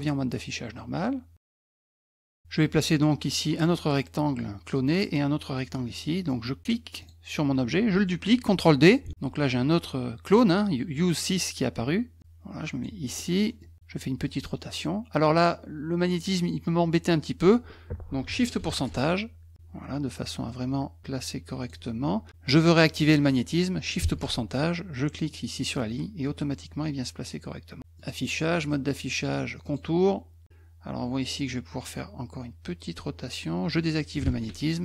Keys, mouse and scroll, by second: 6.2 middle click, 6.2 scroll up 1, 7.0 click, 9.0 ctrl+d, 12.2 click, 13.1 middle click, 13.1-13.5 scroll up 2, 13.3 middle click, 14.3-17.4 drag, 18.7 shift+ù, 20.5-21.7 drag, 24.2 ù, 25.3-27.8 drag, 28.0 click, 29.6 click, 34.2 shift+ù.